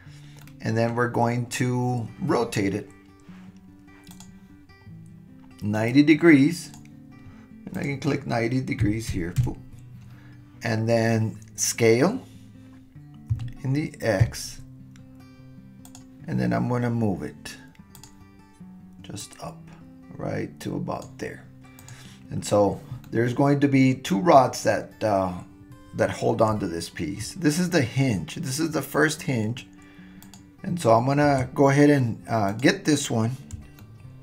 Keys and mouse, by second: 0.4-0.9 middle drag, 4.1 click, 5.9-6.7 drag, 7.8-10.0 drag, 13.3 s, 17.9 drag, 19.3-21.0 drag, 21.9 click, 23.0-24.0 middle drag, 30.2 click, 32.6 click, 33.8-34.2 shift+middle drag.